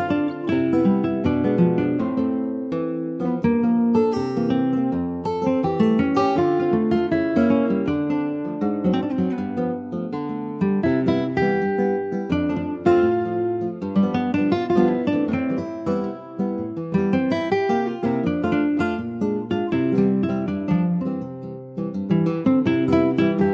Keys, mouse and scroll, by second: 0.2 shift+middle click, 0.8 ctrl+s, 1.2 alt+shift+click, 2.1 middle click, 2.6 click, 3.3 alt+shift+click, 3.9 middle click, 4.3 ctrl+s, 4.9 ctrl+b, 8.6 Tab, 9.2 ctrl+a, 10.5 ctrl+s, 11.1 Tab, 11.5 click, 12.7 alt+shift+click, 13.5 ctrl+b, 22.5 click.